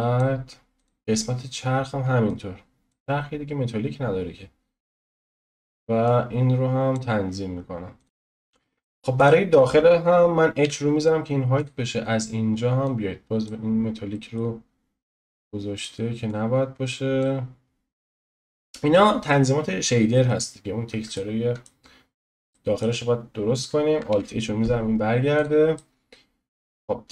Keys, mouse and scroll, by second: 8.0-9.2 middle drag, 9.2 click, 10.6 h, 11.0-11.6 scroll up 1, 11.6 click, 12.8-14.1 drag, 14.1 middle click, 14.4-15.1 scroll up 1, 15.1-17.6 drag, 17.6 scroll down 1, 21.1-24.1 middle drag, 24.1 alt+h, 25.3 click, 25.7-27.1 middle drag.